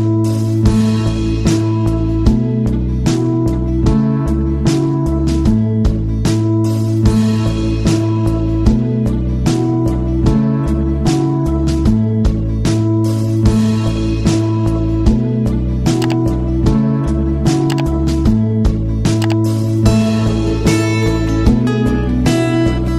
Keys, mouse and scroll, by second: 1.4 right click, 2.2 click, 2.9 right click, 3.8 click, 8.3-17.8 drag, 21.3-22.9 drag.